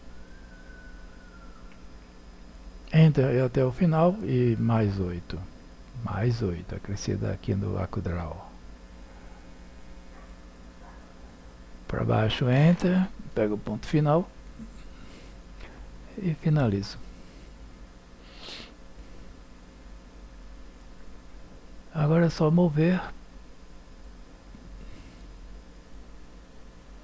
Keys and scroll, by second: 2.9 Return, 11.1 8, 13.3 Return.